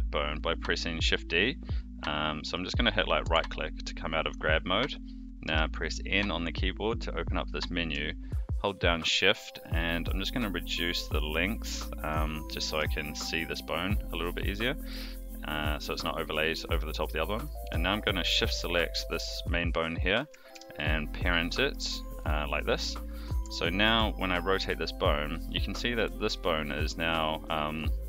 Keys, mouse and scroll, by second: 5.4 n, 9.1-12.9 shift+drag, 20.5 ctrl+p, 23.4 Tab, 23.8 r.